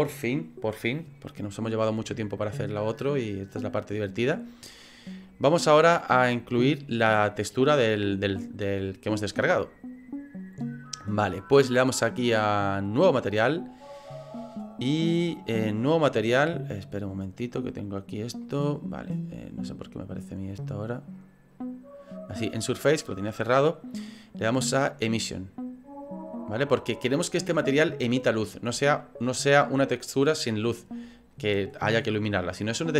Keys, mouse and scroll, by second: 3.2 middle click, 12.9 click, 16.7 right click, 17.3 right click, 18.4 middle click, 20.7 click, 21.1 click.